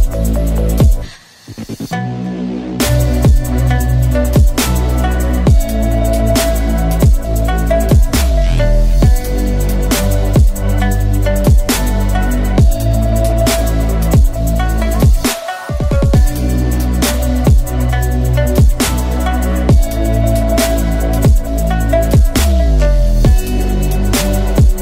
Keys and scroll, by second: 1.5 ctrl+z, 6.5 8, 7.0 F2, 10.1 9, 10.2 5, 10.2 Return, 19.0 Tab, 19.7 ctrl+z, 20.0 Tab.